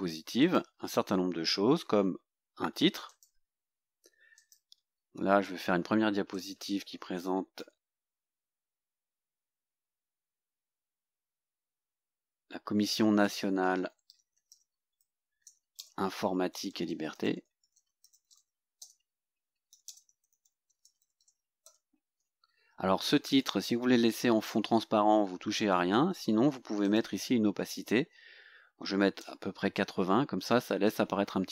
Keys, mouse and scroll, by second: 0.4 click, 3.1 click, 4.4 click, 5.1-5.8 scroll up 2, 6.4 click, 7.6-10.9 typing, 13.1-18.9 typing, 20.0-22.2 typing, 23.7 scroll down 1, 24.0-24.5 scroll up 2, 25.2 scroll down 2, 26.9 click, 29.3 KP_8.